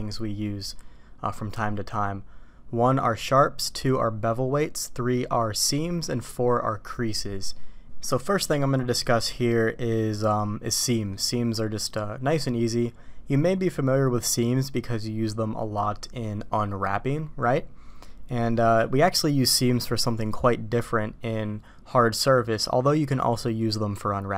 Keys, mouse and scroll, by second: 8.4 middle click, 9.0 middle click, 10.9 middle click.